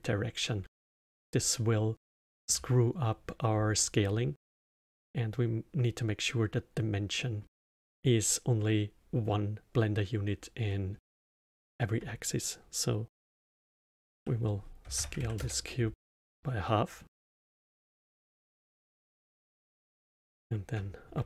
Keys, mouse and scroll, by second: 0.7-5.2 alt+middle drag, 7.1-10.2 middle drag, 10.6-14.2 middle drag, 14.2 s, 16.6 middle click, 17.1 Tab, 18.6 Tab, 20.0 ctrl+a.